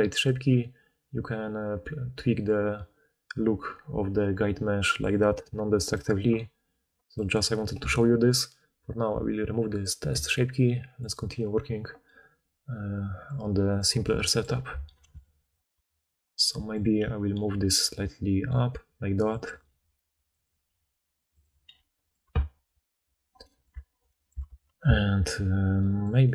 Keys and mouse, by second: 0.2-11.1 drag, 11.1-13.7 middle drag, 13.7 click, 13.7-15.4 middle drag, 15.4 click, 15.5 middle click, 15.9 Tab, 16.0-17.6 middle drag, 16.9 g, 17.6-20.8 drag, 19.8 g, 20.6 g, 20.8-23.2 middle drag, 22.3 Tab, 23.2 click, 23.3-23.7 middle drag, 23.7-26.3 alt+drag, 24.5 alt+a.